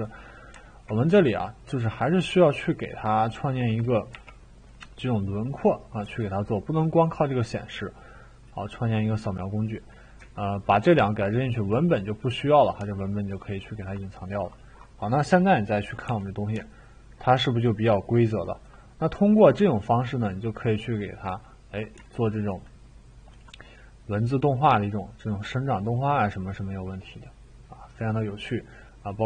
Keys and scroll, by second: 4.1 t, 6.0 e, 15.8-17.2 typing.